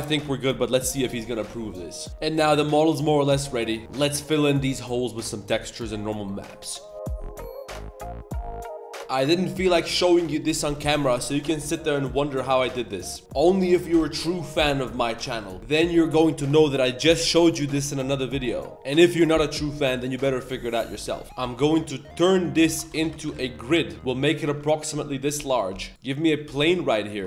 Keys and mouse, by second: 0.0 shift+middle drag, 0.2 Tab, 0.2-0.6 middle drag, 0.7 2, 1.2 click, 2.1 ctrl+s, 2.1 middle click, 2.4 middle drag, 2.5-3.8 middle drag, 9.0-9.4 middle drag, 10.0 middle click, 10.5 shift+middle click, 10.8 middle click, 11.2 middle drag, 11.4 Tab, 11.5 middle drag, 12.3 click, 13.1 click, 15.1 middle click, 21.2 ctrl+z, 21.2 KP_7, 21.2 g, 22.6 a, 22.8 shift+d, 23.0 g, 23.9 middle click, 24.2 middle click, 24.5 Tab, 24.6 click, 25.4 KP_7, 25.9 shift+a, 26.1 click, 26.4 g.